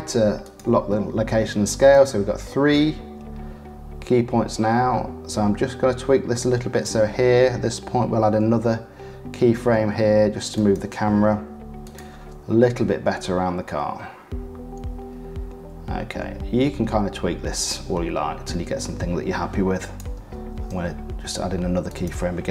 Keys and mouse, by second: 1.9-4.4 drag, 4.8 click, 6.0 click, 8.0 shift+`, 9.5-11.3 middle drag, 11.3 i, 12.7-15.4 drag, 19.9-22.5 middle drag, 20.5 shift+`.